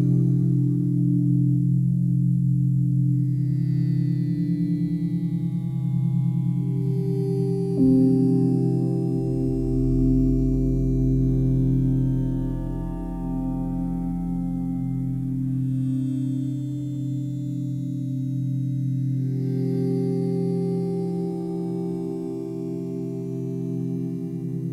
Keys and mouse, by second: 0.8 typing, 2.5 typing, 3.7 click, 5.0-5.4 typing, 6.8 click, 7.8 typing, 8.6 click, 9.0-11.0 alt+drag, 11.1 typing, 11.9-14.7 drag, 14.9 typing, 15.8-17.5 drag, 17.5 typing, 19.1-21.1 drag, 21.1-21.4 typing, 22.4-23.8 alt+drag.